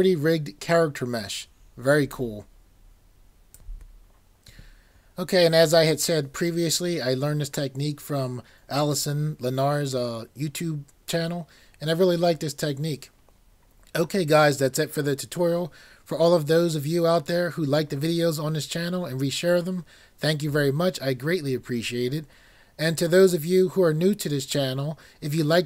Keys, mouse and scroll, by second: 0.8 typing, 21.3 typing.